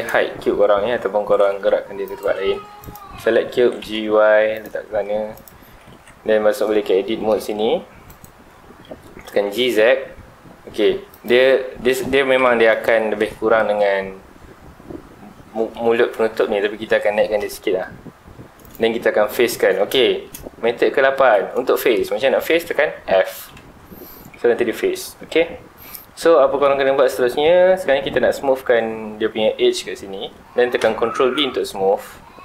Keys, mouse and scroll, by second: 0.2 scroll down 1, 1.1 g, 2.2 right click, 2.5 Tab, 2.8 click, 3.6 g, 4.6 click, 5.0 scroll up 2, 5.3 click, 5.6 Tab, 5.9 2, 6.4-7.3 scroll up 2, 7.3 middle click, 8.1 alt+click, 9.3 g, 11.2 ctrl+click, 11.6 scroll up 1, 12.3 middle click, 12.3 KP_1, 13.0-16.3 shift+middle drag, 16.8 middle click, 17.1 g, 18.7 click, 19.2-19.5 scroll down 2, 19.5-20.6 middle drag, 20.6-21.8 scroll up 2, 21.8-23.5 middle drag, 23.5 f, 24.4 middle click, 25.0 scroll up 2, 25.2 middle click, 26.0-26.8 scroll up 2, 26.8 shift+middle click, 27.3-27.9 scroll up 2, 27.9-29.9 scroll down 2, 29.9-30.5 scroll down 1, 30.5-31.1 scroll up 2, 31.1 ctrl+b.